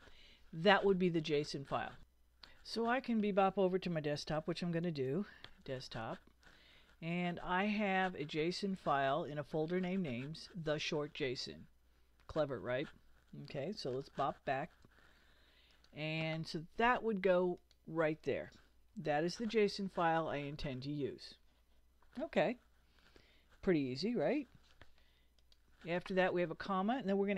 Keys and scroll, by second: 4.8 super+Tab, 13.9 super+Tab, 18.9 super+v.